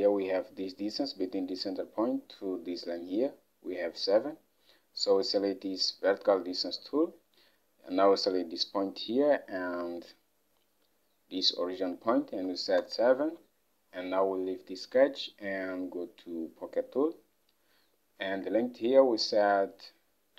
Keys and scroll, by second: 12.5 7, 12.9 Return, 15.4 typing, 18.3 alt+Tab.